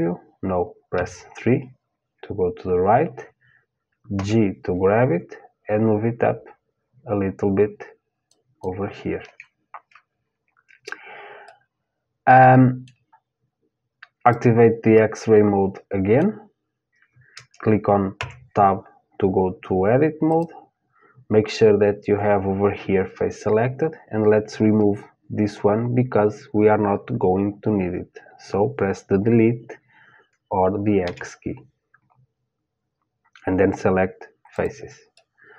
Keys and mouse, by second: 0.6 KP_3, 3.8 g, 11.0-13.2 middle drag, 13.8-15.8 drag, 14.6-16.6 middle drag, 17.8 Tab, 19.9-22.1 drag, 30.6 Delete, 34.8-35.5 middle drag.